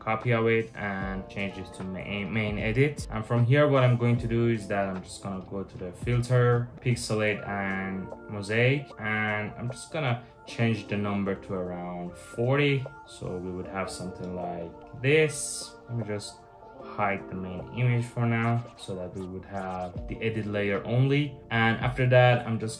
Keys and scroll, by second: 1.0-1.8 typing, 11.3-15.3 typing, 12.6 Return, 16.4-18.1 typing.